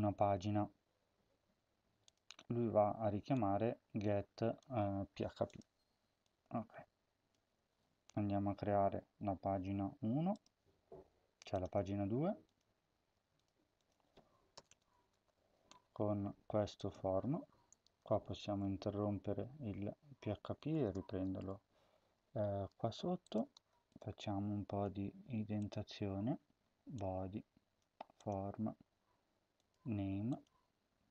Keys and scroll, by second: 7.4 ctrl+c, 14.4 Return, 14.5 Return, 15.0 Up, 15.2 ctrl+v, 17.7 shift+[, 17.8 shift+\, 18.6-19.4 Down, 20.1-21.8 typing, 23.3 Return, 24.9 Tab, 27.7 Tab.